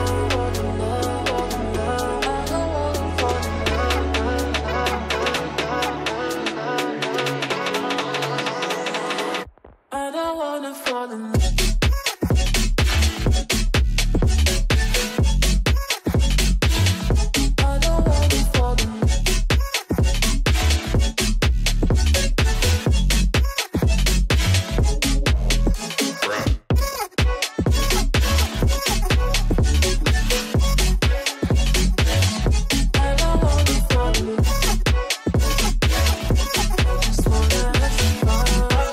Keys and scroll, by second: 15.5 Escape, 22.4 space, 24.4 Escape, 25.8 Delete, 28.1 ctrl+z, 33.4 ctrl+z, 37.7 space, 38.1 F3, 38.3 Escape.